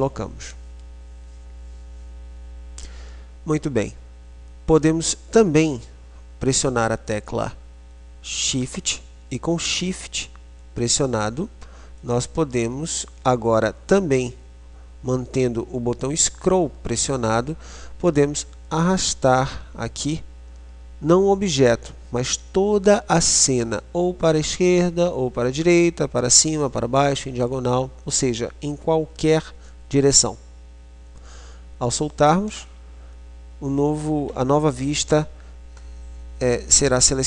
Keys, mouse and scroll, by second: 12.0-14.7 middle drag.